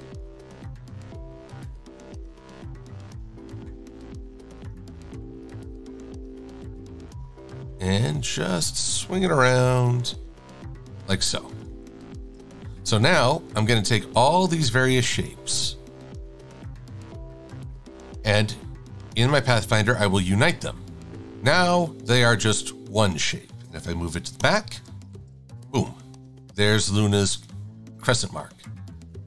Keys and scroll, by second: 12.7 v, 21.7 shift+super+a, 24.5 shift+super+[, 25.2 shift+super+a.